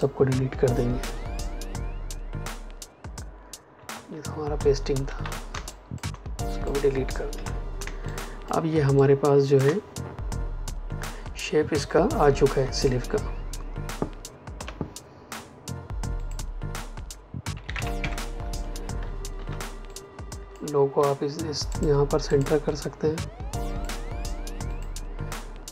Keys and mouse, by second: 1.0 Delete, 3.7 ctrl+Num_Lock, 3.8 ctrl+z, 5.0 ctrl+shift+z, 5.4 space, 5.6 click, 5.9 space, 6.3 click, 7.2 Delete, 7.7 space, 8.0 click, 8.2 space, 8.7 ctrl+space, 8.9 ctrl+click, 14.5 l, 16.1 click, 17.4 KP_3, 17.5 Tab, 17.6 KP_3, 17.9 KP_Enter, 18.5 v, 19.3 shift+x, 19.8 click, 21.6 shift+click, 22.2 click.